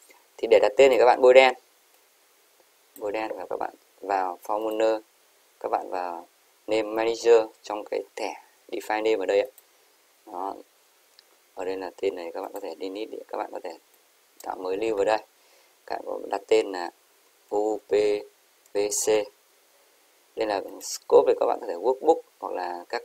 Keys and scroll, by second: 17.6-17.9 typing, 19.0 typing.